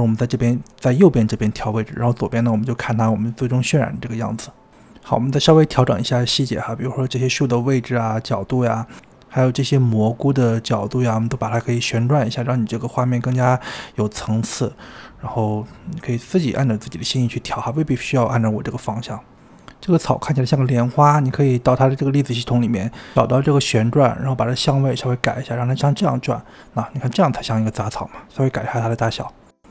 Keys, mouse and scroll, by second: 4.7 shift+middle click, 5.1 click, 5.5-5.8 middle drag, 5.8 click, 6.1 g, 6.6 s, 6.9 s, 7.1 g, 7.4 middle click, 7.6 click, 7.9-9.1 shift+middle drag, 9.4 click, 9.5 ctrl+z, 9.8-12.2 typing, 10.1 middle click, 10.7 click, 10.7 scroll down 9, 11.0-11.5 scroll up 3, 11.2 click, 11.4 middle click, 11.5 scroll down 2, 12.1 click, 12.2 middle click, 12.5 click, 12.5 click, 12.6 click, 14.2-16.8 typing, 14.2 shift+middle click, 14.6 click, 15.1 Tab, 15.2 scroll up 3, 15.3 Tab, 15.5 click, 15.9 scroll up 5, 16.0 scroll down 3, 16.1 shift+middle click, 16.5 middle click, 17.0 click, 17.2 shift+middle click, 17.8 g, 18.3 click, 18.5 g, 19.2 click, 19.3-20.4 scroll down 8, 21.0-21.6 scroll up 3, 21.6-25.5 drag, 25.8 click, 26.1 s, 26.6 click, 26.8 click, 27.9 click, 29.2 shift+middle drag, 29.4 click, 29.5-29.7 typing, 29.6 scroll up 4.